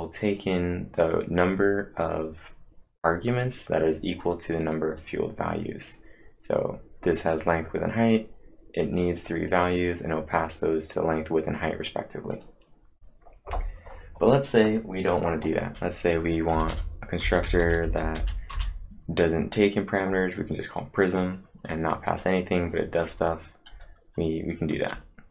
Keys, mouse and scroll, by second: 0.4 click, 3.9-4.7 typing, 4.2 click, 8.6-9.3 typing, 8.8 click, 9.5 click, 12.3 click, 16.3-18.7 typing, 16.5 click.